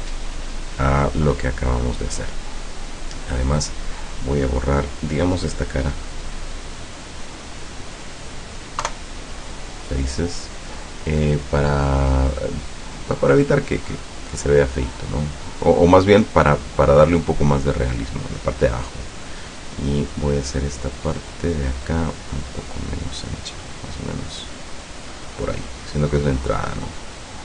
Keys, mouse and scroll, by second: 3.8 right click, 5.0 right click, 8.9 Delete, 9.6 click, 15.7 middle click, 16.3 middle click, 16.5 scroll up 1, 16.8 right click, 18.7 click, 19.9 right click, 21.3 middle click, 21.9-25.4 drag, 25.7 click, 26.5 click, 27.2-27.4 middle drag.